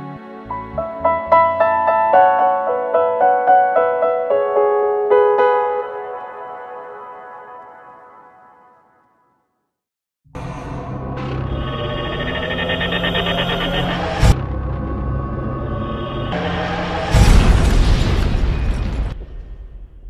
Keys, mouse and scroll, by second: 0.0 middle click, 0.5 scroll up 1, 0.7 middle click, 2.7 KP_7, 3.5-4.3 scroll down 3, 9.4-10.0 scroll up 1.